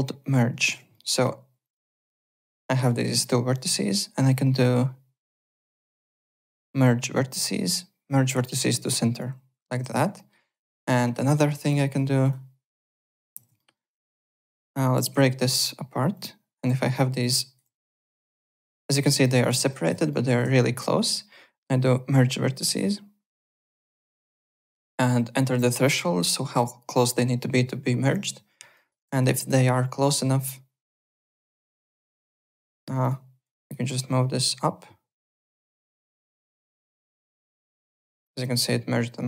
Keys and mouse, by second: 0.2 click, 0.9 alt+middle click, 1.6 click, 1.9 shift+click, 2.1 alt+middle click, 3.5 shift+right click, 9.8 ctrl+z, 10.1 alt+middle click, 10.4 alt+right click, 10.8 alt+middle click, 11.3 alt+right click, 11.5 alt+middle click, 11.7 alt+right click, 12.2 click, 13.3 ctrl+z, 13.6 alt+middle click, 13.7 alt+right click, 14.1 alt+middle click, 14.4 alt+right click, 14.9 ctrl+b, 15.4 click, 16.1 click, 16.8 alt+right click, 16.9 alt+click, 17.2 alt+right click, 17.8 click, 18.6 alt+middle click, 19.0 alt+right click, 19.7 click, 20.1 alt+middle click, 20.6 shift+right click, 24.1 click, 28.1 click, 28.7 alt+right click, 29.2 shift+right click, 32.1 click, 33.0 click, 33.5 click, 35.9 click, 36.6 click, 37.3 KP_0, 37.5 KP_Decimal, 37.6 KP_1, 37.7 Return, 37.7 KP_Enter.